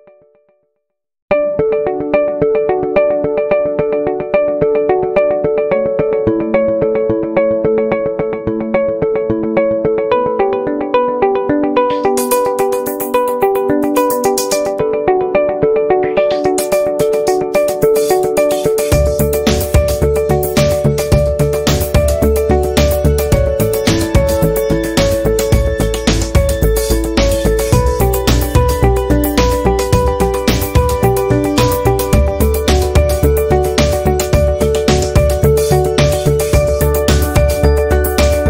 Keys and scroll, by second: 8.1 v, 8.6 i, 9.8 p, 17.6 v, 26.2 i, 29.5 p, 33.2 a, 35.9 Delete, 36.9 Delete, 38.2 p.